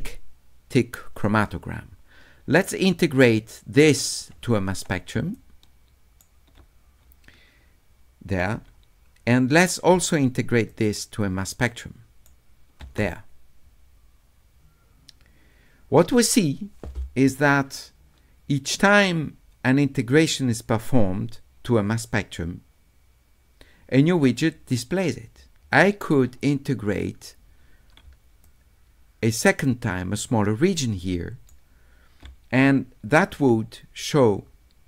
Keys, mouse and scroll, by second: 2.8 click, 3.2 scroll up 2, 5.2 s, 5.3 right click, 9.9 s, 10.7 right click, 11.0-12.3 middle drag, 28.1 s, 28.4-31.5 middle drag.